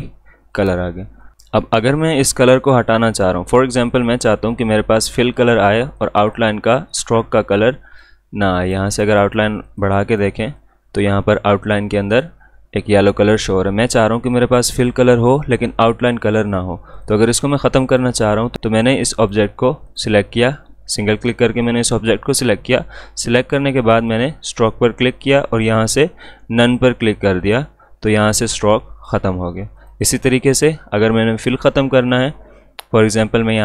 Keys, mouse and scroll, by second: 6.0-16.8 drag, 16.9-19.2 drag, 23.9 click, 27.4 click.